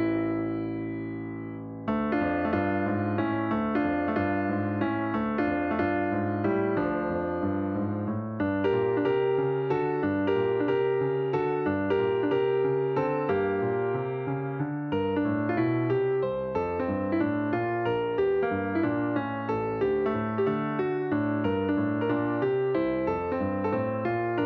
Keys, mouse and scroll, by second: 1.9-3.5 drag, 5.5 click, 6.2-6.8 scroll down 4, 7.2 click, 8.1 click, 8.8 drag, 9.1 click, 9.7 drag, 10.1 click, 10.6 click, 10.9 drag, 11.4 click, 12.1 h, 12.9 a, 14.0 drag, 14.8 click, 17.6-21.5 drag, 23.0 drag, 24.0 click.